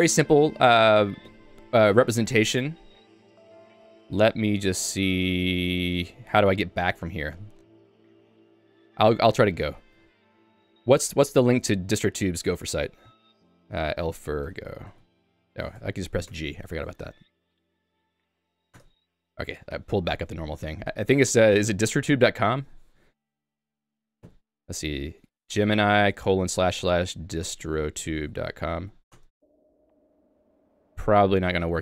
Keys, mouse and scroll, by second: 0.1 ctrl+u, 0.3 ctrl+u, 1.3 ., 7.3 ctrl+g, 16.3 Return, 18.8 Return, 24.3 g, 29.3 Return.